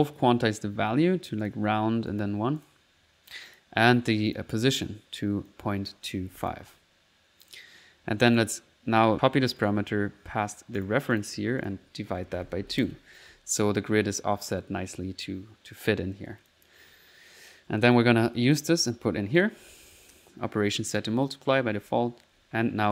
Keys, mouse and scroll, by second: 1.5 click, 2.1 click, 3.5 click, 4.3 click, 5.5 click, 8.4 right click, 8.6-9.3 typing, 9.2 click, 9.6 right click, 9.9 right click, 10.8 click, 11.6 click, 16.5 click, 18.0-19.1 drag, 19.4 click, 21.6-22.9 typing.